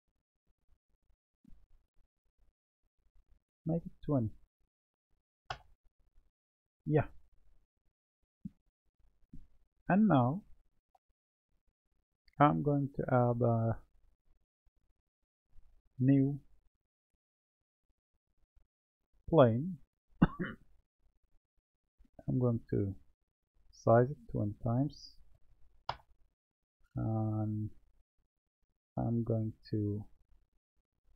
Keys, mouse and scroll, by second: 4.0-7.0 drag, 9.2-12.2 middle drag, 14.2 Tab, 15.7-18.9 drag, 21.6 click, 24.3-27.3 drag, 27.5-29.0 middle drag, 29.0-30.4 drag.